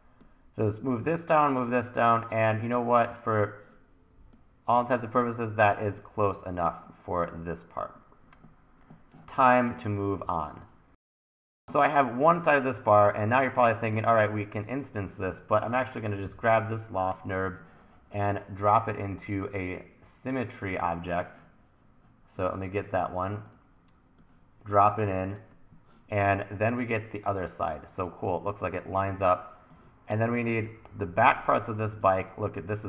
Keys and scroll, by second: 6.0 super+z, 10.2 t, 15.3 super+s, 16.2 e, 29.3 1, 30.7 1, 32.6 1.